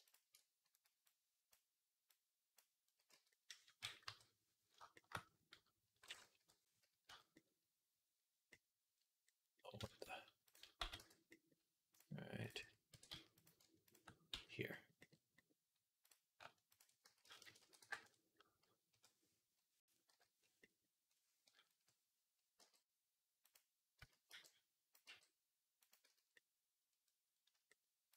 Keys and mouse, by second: 0.1 alt+middle click, 0.9-3.9 drag, 3.0 z, 3.9 KP_3, 6.2-10.3 drag, 6.2 /, 6.9 z, 10.3-11.7 middle drag, 10.6 x, 11.7 click, 11.8 middle click, 12.3 click, 12.8 e, 14.2 f, 15.9 click, 16.6 ctrl+click, 16.9 s, 17.4-20.7 middle drag, 17.4 s, 18.7 KP_3, 19.9 /, 21.5 KP_3, 22.4 g, 23.8 z, 24.1 b, 24.9 g, 25.9 z, 26.1 click, 26.2 middle click, 26.5 middle click, 26.9 click, 27.0 click, 27.1 click.